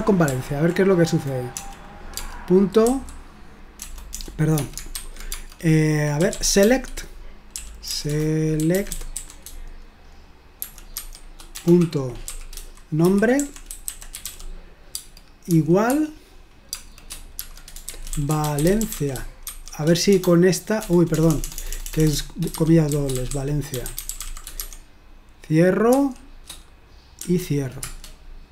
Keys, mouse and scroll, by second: 0.3 ctrl+p, 1.5-4.9 typing, 6.0-11.5 typing, 12.8-26.0 typing, 27.2 typing, 27.8 Return.